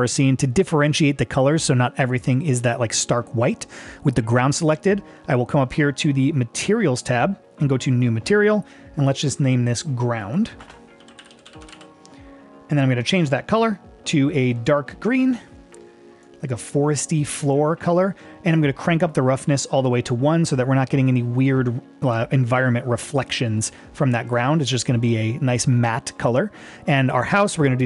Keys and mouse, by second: 8.1-9.1 drag, 10.4-13.1 drag, 19.2-24.4 drag.